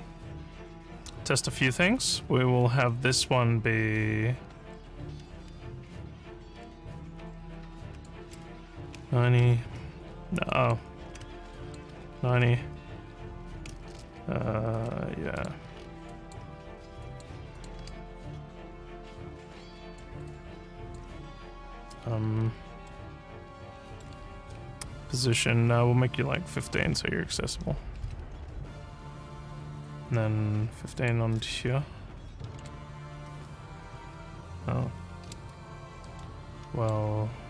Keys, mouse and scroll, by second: 7.9 click, 10.5 click, 11.5 click, 14.0 w, 15.4 click, 15.8 alt+scroll up 4, 16.1 alt+click, 17.1 alt+click, 17.6 click, 17.8 w, 19.5 click, 20.3 alt+click, 22.4 alt+scroll up 1, 22.9-24.0 alt+middle drag, 25.2 click, 30.9 click, 32.2-33.1 typing, 36.2 alt+middle click.